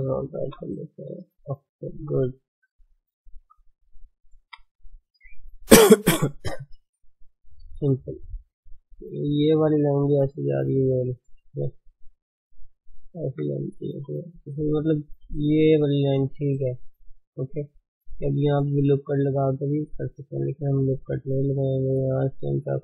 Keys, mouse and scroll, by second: 0.4 g, 2.1 shift+middle click, 2.5-2.9 scroll up 2, 2.9 drag, 3.4-4.4 shift+middle drag, 4.4 KP_1, 7.0 scroll up 1, 7.4 Tab, 7.9 shift+middle click, 8.2-9.2 scroll up 4, 9.2-10.3 shift+middle drag, 10.3-11.0 d, 11.1-12.6 drag, 12.6 d, 12.8 click, 13.2 d, 13.9 shift+z, 16.4 shift+z, 17.4 shift+z, 20.2 click, 20.6 alt+shift+click, 21.5-22.8 alt+shift+drag.